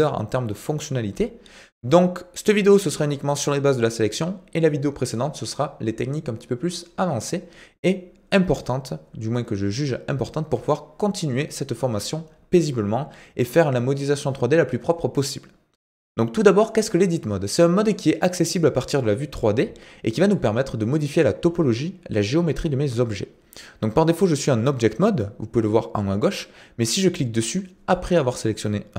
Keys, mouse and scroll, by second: 27.5-28.9 drag.